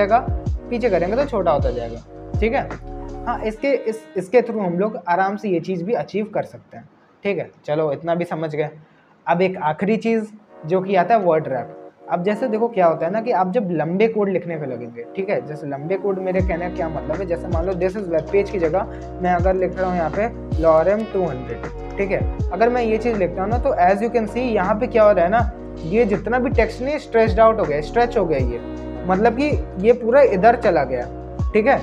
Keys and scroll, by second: 17.4 ctrl+BackSpace, 19.2-21.4 typing, 21.7 Return.